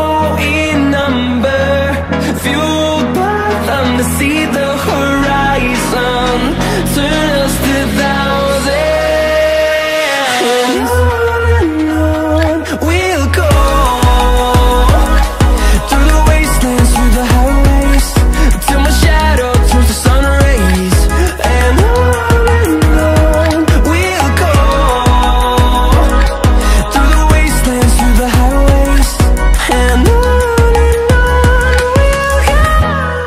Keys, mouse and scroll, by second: 0.0 click, 0.1-0.5 scroll up 2, 0.5-1.2 shift+middle drag, 1.2-2.0 scroll up 2, 2.1-5.6 drag, 5.6 s, 8.2 s, 11.8-14.1 drag, 14.1 shift+d, 15.2 s, 16.6 s, 19.4-23.2 drag, 24.2 click, 25.6 click, 26.6 shift+click, 27.8 shift+d, 32.4 s.